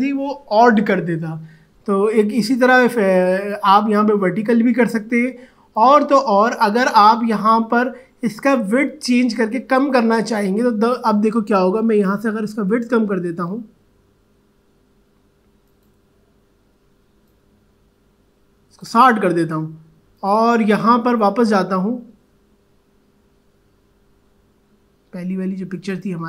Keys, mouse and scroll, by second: 7.4 click, 10.8 click, 15.6-20.1 drag, 25.9 click.